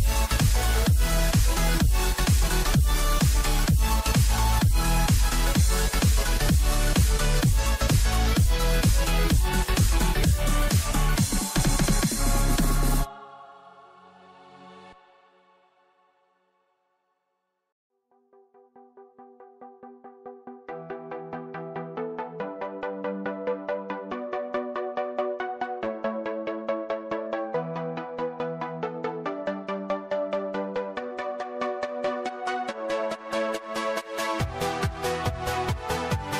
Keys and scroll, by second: 0.6 ctrl+d, 4.1 ctrl+0, 5.3 ctrl+=, 7.9 ctrl+alt+z, 10.7 ctrl+0, 15.8 ctrl+=, 17.5 ctrl+-, 18.7 ctrl+=.